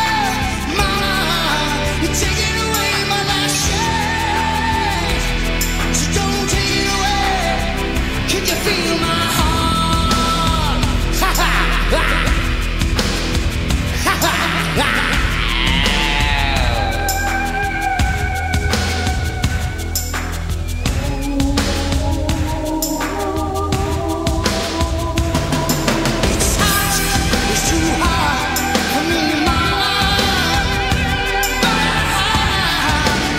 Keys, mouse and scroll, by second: 6.1-7.3 drag, 7.3-11.0 middle drag, 8.6 Delete, 9.5 Delete, 11.9 click, 12.4 Delete, 14.4 click, 15.0 Delete, 16.3 Delete, 18.5 click, 21.4-24.4 right drag, 24.4-25.6 middle drag, 32.1 click, 32.1-33.3 middle drag, 32.1-33.3 right drag.